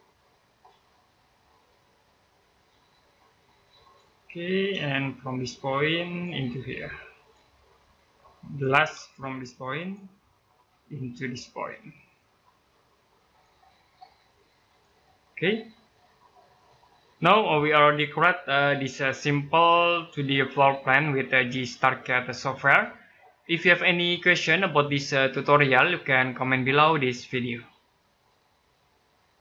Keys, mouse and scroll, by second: 0.2-0.8 scroll down 1, 3.6 click, 4.2 scroll up 1, 4.5 space, 5.9 click, 8.8 space, 9.5 click, 9.9 scroll down 1, 10.1 middle click, 10.5-12.8 scroll up 1, 13.1 click, 14.9-15.3 scroll down 1, 15.3 middle click, 15.9-16.3 scroll up 1, 16.3 middle click.